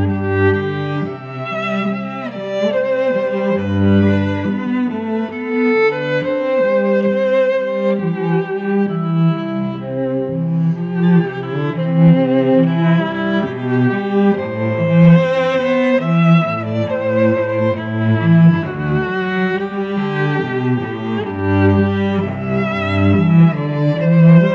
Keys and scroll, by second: 3.5 space, 6.5 ctrl+z, 6.8 a, 8.4 v, 9.0 ctrl+t, 12.1 Return, 12.6 shift+Down, 13.6 shift+Right, 14.0 shift+Up, 15.4 space, 19.6 space, 20.3 Tab.